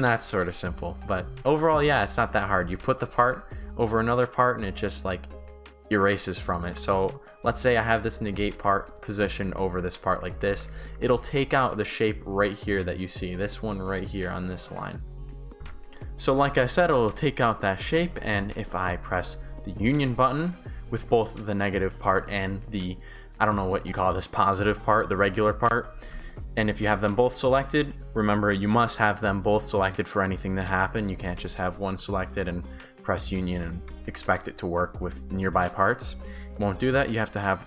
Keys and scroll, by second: 4.2 Pause, 7.9-11.4 typing, 12.5 shift+s, 15.5 shift+w, 15.6 Pause, 17.7 shift+w, 18.0 shift+s, 21.0 ctrl+z.